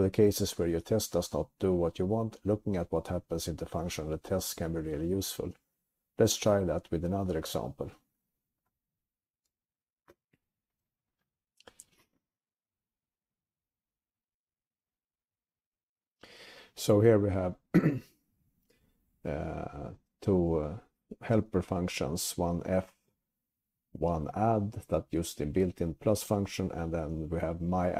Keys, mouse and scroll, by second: 10.1 alt+>, 10.1 alt+<, 10.1 ctrl+s, 10.1 click, 10.1 BackSpace, 10.1 1.